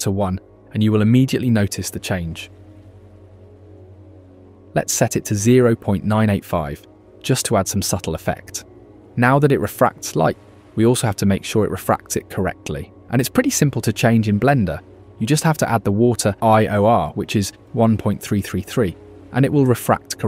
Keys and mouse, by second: 1.2 click, 3.2 click, 3.8 click, 5.0-7.5 drag, 10.2 ctrl+s, 16.4 click, 18.8-20.2 drag.